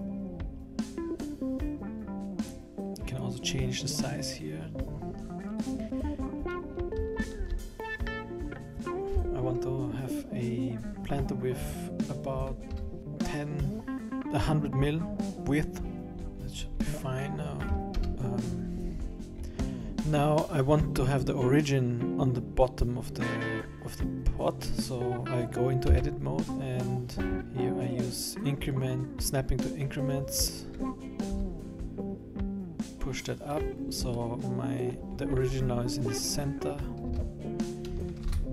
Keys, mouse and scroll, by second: 0.3-1.5 scroll down 7, 3.1 click, 5.5 click, 16.2-17.5 scroll up 9, 18.0 KP_1, 18.8-19.3 scroll down 6, 19.3-20.9 scroll up 10, 24.4-25.9 scroll down 1, 25.9 Tab, 27.9 click, 31.3 g, 33.8-34.1 scroll down 3, 34.1 middle click, 35.1-36.4 scroll up 14, 37.1 Tab, 38.2 shift+b.